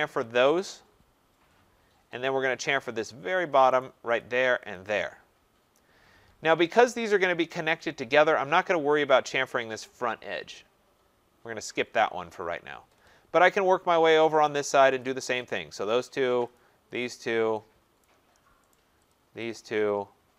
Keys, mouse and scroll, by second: 0.3 click, 1.6 middle click, 1.6 middle click, 2.6 right click, 2.8 middle click, 2.9 middle click, 3.3 middle click, 3.4 middle click, 3.8 right click, 4.2 click, 4.7 click, 4.9-5.4 scroll, 7.2 right click, 13.1 scroll down 1, 13.1 scroll up 2, 13.9 scroll down 2, 14.6 right click, 15.0 click, 15.0-15.5 scroll, 15.5 click, 16.1 right click, 16.5 click, 17.0 click, 18.0 right click, 18.7 right click, 19.1 click, 19.5 click, 20.0 middle click.